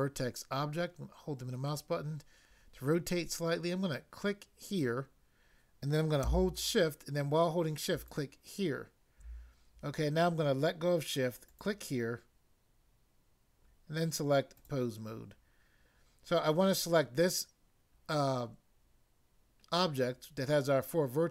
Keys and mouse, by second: 0.7 middle click, 4.7 click, 8.0 shift+click, 11.4 click, 14.5 click.